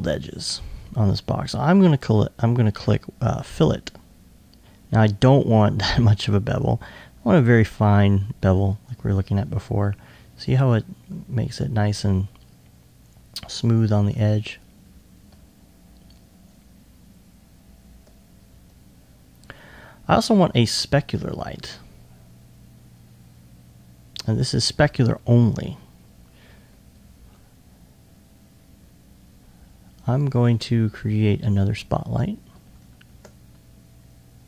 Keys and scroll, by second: 19.1 2.